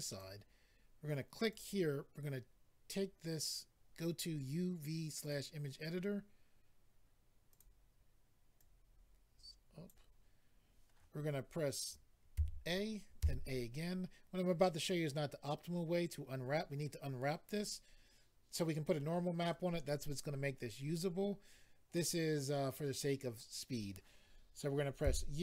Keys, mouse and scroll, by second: 1.5 click, 1.6 click, 5.2 click, 5.3 click, 7.5 click, 7.6 click, 8.6 click, 13.2 a.